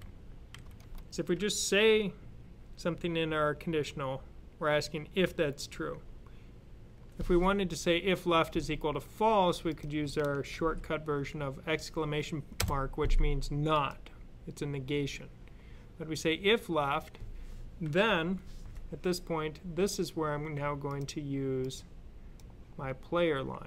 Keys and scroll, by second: 0.4 shift+[, 10.4 shift+\.